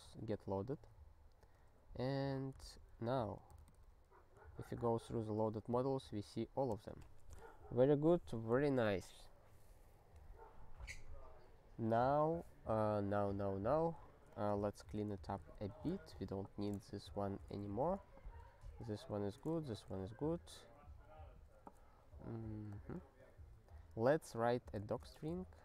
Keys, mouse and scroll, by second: 1.4 alt+x, 2.7 Return, 6.7 ctrl+g, 14.3 click, 14.8 ctrl+space, 14.9 ctrl+p, 15.1 ctrl+a, 15.3 ctrl+w, 15.8 ctrl+alt+k, 16.5 ctrl+n, 16.9 alt+^, 17.7 ctrl+s, 18.2 ctrl+n, 19.1 ctrl+n, 19.5 alt+^, 20.0 ctrl+s, 22.7 click, 23.3 ctrl+n, 24.7 Return, 25.1 ".